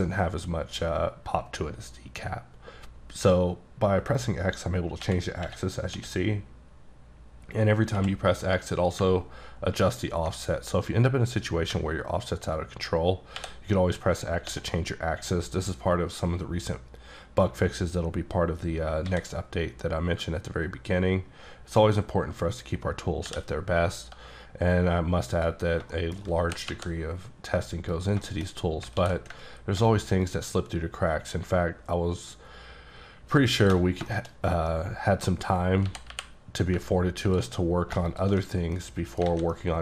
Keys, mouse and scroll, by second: 5.1 x, 6.0 x, 8.0 x, 13.4 x, 14.5 x, 19.1 a, 25.3 click, 25.9 shift+middle click, 26.4 g, 26.7 y, 27.2 g, 28.0 click, 28.3 shift+middle click, 28.5-29.0 shift+scroll down 3, 29.0 alt+w, 30.3 ctrl+shift+click, 34.1 shift+middle click, 34.3-34.7 shift+scroll down 2, 34.7 middle click, 35.3-35.7 scroll up 5, 35.9 g, 36.1 y, 37.3 ctrl+click, 37.6-38.0 scroll down 2, 38.1 shift+click, 38.6 scroll down 1, 39.1 middle click, 39.3 alt+a, 39.5 middle click.